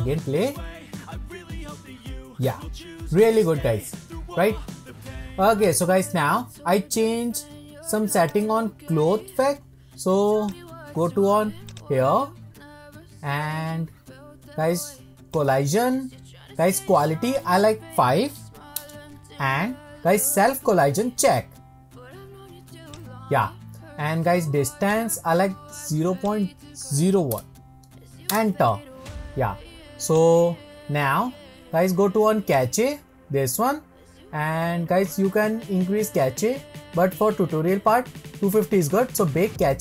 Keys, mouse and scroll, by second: 2.7 middle click, 3.0-4.2 middle drag, 6.5-10.5 drag, 11.6 click, 12.9-15.3 scroll down 21, 15.3 click, 15.8-17.3 scroll down 7, 17.3-20.3 drag, 21.3 drag, 23.0 click, 24.9-27.9 drag, 30.1-31.9 drag, 31.9-32.5 scroll up 1, 32.5-34.8 drag, 34.8-37.9 scroll down 2, 39.6-39.8 drag.